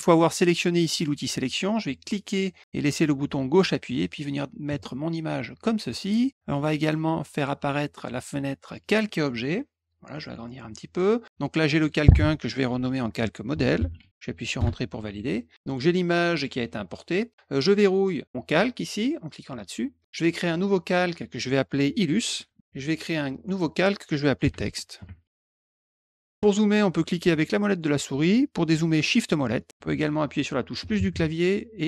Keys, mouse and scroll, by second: 2.0-5.9 drag, 6.8 click, 8.8 click, 10.1 click, 11.6 click, 11.8 click, 13.3-14.5 typing, 14.5 Return, 15.6 click, 19.6 click, 20.8 click, 22.0-23.0 typing, 23.4 click, 24.2-25.7 typing, 27.3 middle click, 27.3-27.8 scroll up 2, 27.7 middle click, 29.1 shift+middle click, 29.1 shift+scroll down 2, 29.6 shift+middle click.